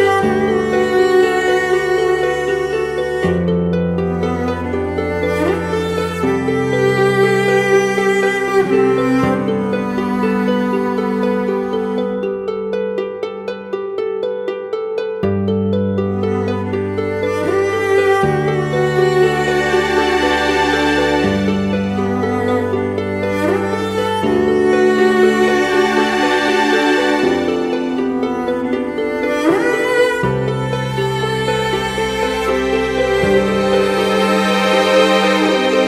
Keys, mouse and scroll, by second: 8.5 alt+right click, 10.0 double click.